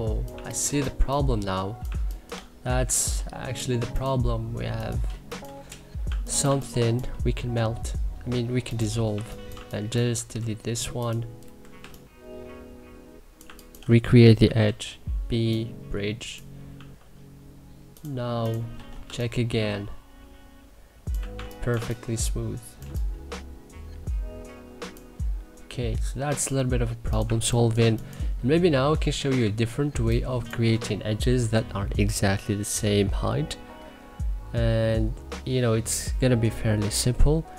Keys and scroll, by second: 0.4 3, 1.5 2, 2.3 c, 2.8 e, 5.6 2, 6.1 1, 8.7 1, 9.2 2, 9.9 w, 11.3 Delete, 11.4 3, 13.1-14.8 typing, 16.3 2, 18.4 e, 18.7 3, 20.6-21.8 typing, 26.9 1, 27.4 2, 28.9 q, 29.5 2.